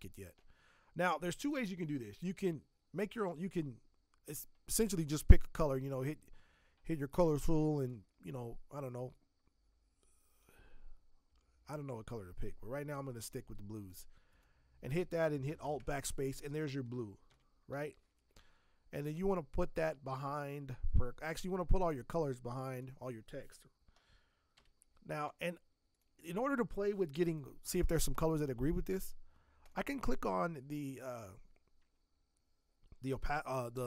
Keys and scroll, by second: 15.6 alt+BackSpace, 17.3 ctrl+d, 17.7 v, 24.5 v.